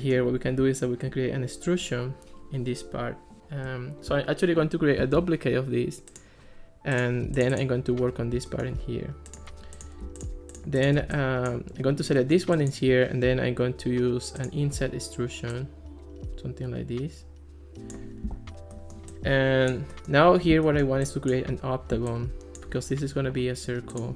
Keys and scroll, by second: 5.0 super+d.